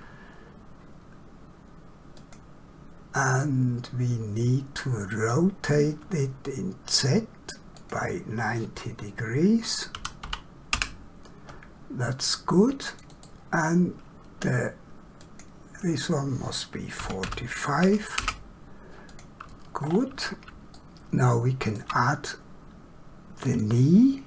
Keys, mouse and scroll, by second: 2.3 click, 3.4 middle click, 7.8 click, 9.9 9, 10.2 0, 10.8 Return, 12.4 middle click, 15.2 click, 17.0 4, 17.3 5, 18.3 Return, 19.1 click, 19.8 scroll down 1, 20.8 shift+middle click, 23.4 click.